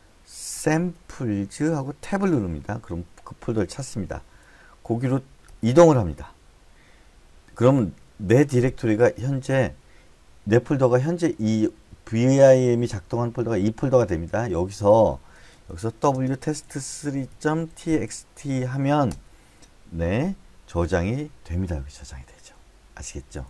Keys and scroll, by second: 0.7-2.5 typing, 5.4 Return, 15.5-18.9 typing.